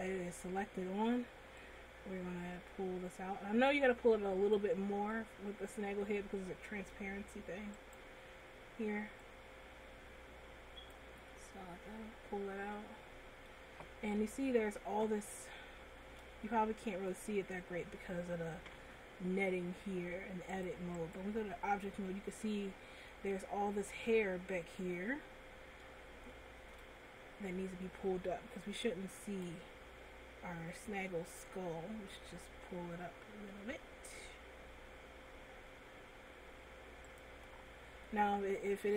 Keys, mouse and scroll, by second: 2.0 click, 5.4 middle click, 6.6 middle click, 8.1 right click, 9.6 click, 11.6 middle click, 14.1 scroll up 2, 15.6 shift+middle click, 16.7 middle click, 20.7 click, 21.5 click, 22.7 middle click, 25.6-26.1 scroll up 2, 26.5 shift+middle click, 28.2 Tab, 29.6 right click, 29.7 right click, 37.5 click, 37.8-38.1 scroll down 2, 38.3 middle click.